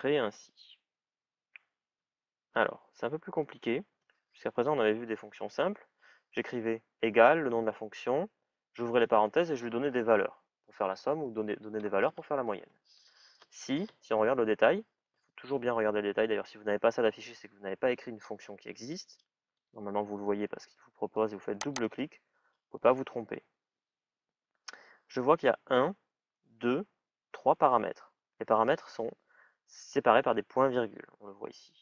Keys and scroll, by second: 1.3 shift+s, 1.8 shift+i, 19.6 typing.